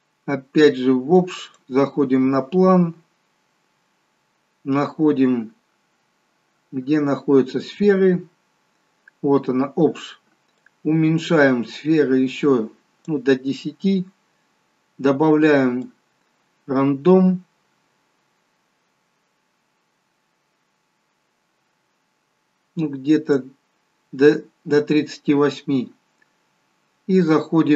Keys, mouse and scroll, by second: 0.2 scroll down 16, 1.1 scroll up 2, 2.9 click, 2.9 scroll up 1, 4.8-6.2 scroll down 2, 6.2-6.8 scroll up 3, 6.8 scroll down 1, 9.0-11.1 scroll down 11, 11.1 click, 16.2 click, 26.3 scroll up 4.